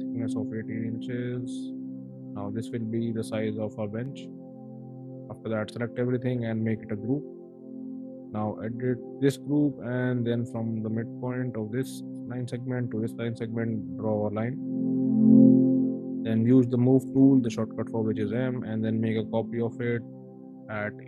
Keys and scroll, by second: 0.6 1, 1.1 8, 1.5 Return, 1.9 space, 6.7 ctrl+g, 9.4 l, 15.3 m, 15.7 space, 16.8 m, 19.5 1, 20.4 8.